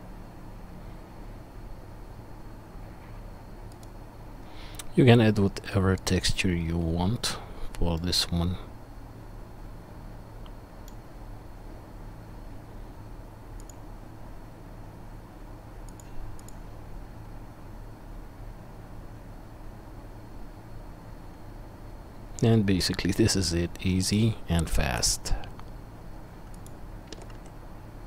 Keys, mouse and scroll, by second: 3.7 middle click, 3.8-28.0 right drag, 13.6 click, 13.6 middle click, 16.0-24.1 drag, 16.0-24.1 middle drag, 24.6 g, 27.1 g.